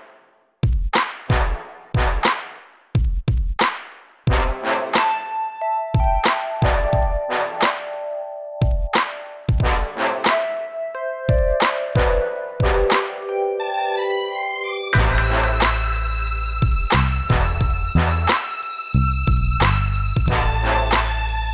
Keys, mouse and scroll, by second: 0.1 scroll down 2, 0.9 scroll up 2, 3.8 click, 6.0 click, 8.0 click, 10.3 click, 10.3 click, 11.1 click, 11.2 click, 11.4 click, 11.5 click, 16.8 click, 16.9 click, 17.6 click.